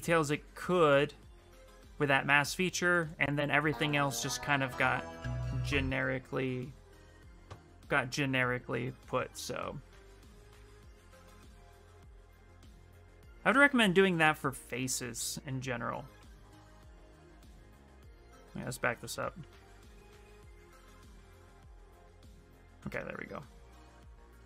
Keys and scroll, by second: 12.4 ctrl+z, 13.2 ctrl+z, 13.7 ctrl+z, 17.5 ctrl+z, 17.8 ctrl+z, 18.0 ctrl+z, 18.4 ctrl+z, 18.6 ctrl+z, 18.9 ctrl+z, 19.2 ctrl+z, 19.6 ctrl+z, 20.1 ctrl+z, 21.3 ctrl+z, 22.0 ctrl+z, 23.6 d.